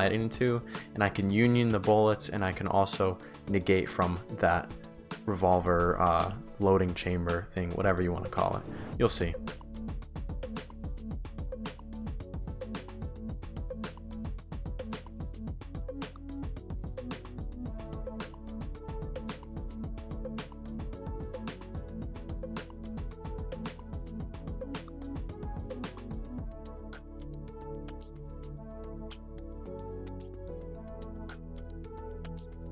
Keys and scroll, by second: 10.6-11.4 typing, 11.9 ctrl+d, 14.9 ctrl+d, 16.5-18.5 typing, 19.0 ctrl+d, 19.7-24.3 typing, 21.0 ctrl+d, 22.8 ctrl+d, 27.1-27.9 typing, 29.1 shift+w, 31.9 ctrl+d.